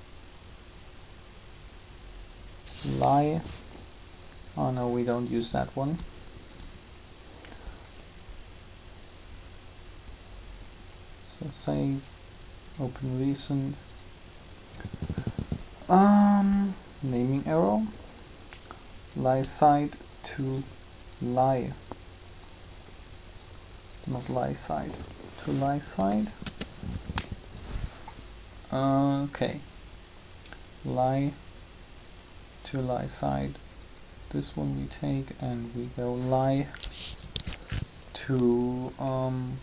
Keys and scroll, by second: 25.8 BackSpace, 26.3 Return.